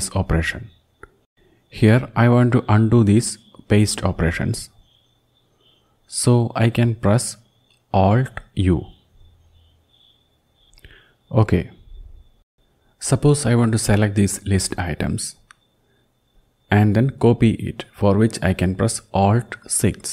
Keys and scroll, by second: 9.3 alt+u, 9.6 alt+u, 9.8 alt+u, 10.0 alt+u, 10.2 alt+u, 10.4 alt+u, 10.9 alt+u, 11.9 alt+u, 12.6 Left, 12.6 Up, 12.6 Home, 14.1 shift+Down, 14.6 shift+Down, 14.7 shift+Down, 15.2 shift+Down, 19.6 alt+6.